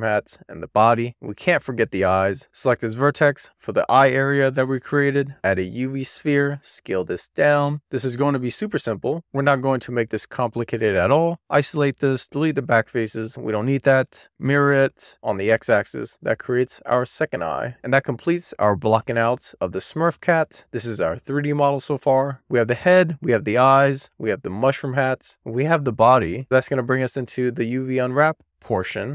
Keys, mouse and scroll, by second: 0.6 middle click, 1.3 scroll up 1, 1.5 scroll down 2, 1.6-2.1 scroll up 1, 2.1-2.8 middle drag, 3.4 alt+middle click, 3.5 Tab, 3.6-4.1 scroll up 3, 4.1 click, 4.6-9.7 typing, 6.7 Tab, 7.0 click, 7.3 middle drag, 7.5 scroll up 1, 8.1 middle click, 8.4 middle click, 8.8 middle click, 8.9 scroll down 3, 9.3 middle click, 9.6 middle click, 10.0 middle click, 10.3 middle click, 10.8 middle click, 11.2 scroll up 1, 11.6 Tab, 11.7 middle click, 12.2 alt+z, 12.3 click, 12.5 x, 13.0 alt+z, 13.4 middle click, 13.8 Tab, 14.4 click, 14.6 click, 14.7 click, 15.1 click, 15.3 middle click, 15.5 Tab, 15.8 shift+middle click, 16.8 shift+s, 17.0 middle click, 17.3 scroll down 1, 17.7 middle click, 18.2-29.1 middle drag.